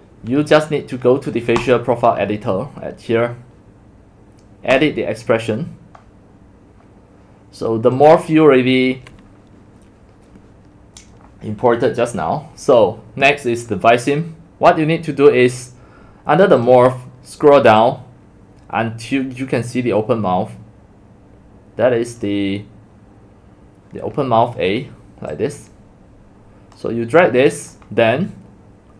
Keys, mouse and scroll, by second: 24.7 click.